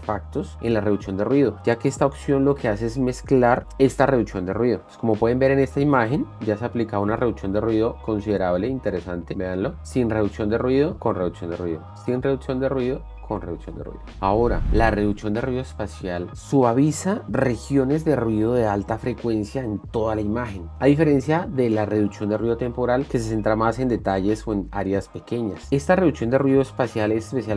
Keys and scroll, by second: 7.1 ctrl+d, 8.3 ctrl+d, 9.4 d, 10.3 ctrl+d, 11.4 d, 12.5 ctrl+d.